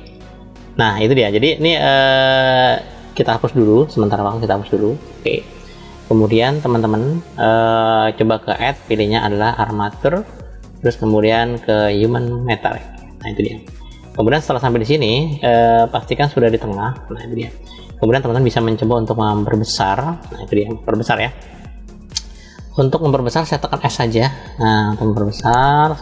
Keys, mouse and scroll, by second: 1.0 click, 2.2 click, 3.4 Delete, 4.4 click, 4.9 Delete, 5.5-6.4 middle drag, 8.3-12.8 drag, 14.8-18.0 middle drag, 18.1 scroll down 2, 18.7-19.7 shift+middle drag, 20.0-21.0 scroll up 1.